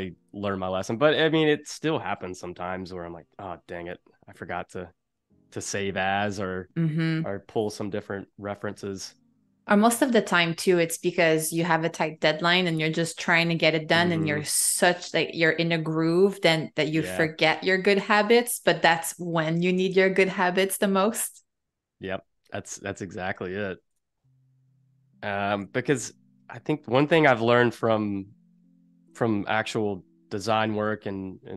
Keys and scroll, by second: 19.1 super+z, 21.2 v, 23.7 shift+super+g, 25.5 shift+super+g, 30.6 super+g.